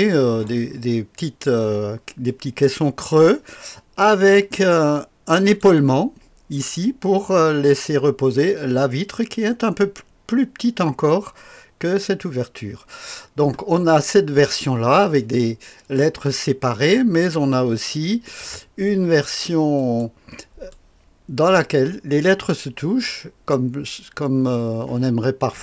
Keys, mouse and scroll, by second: 0.5 click, 4.2-5.6 drag, 5.9 click, 13.8-14.3 scroll down 2, 14.3-14.9 scroll up 2, 16.3-17.0 scroll down 2, 19.8 click, 20.7 click.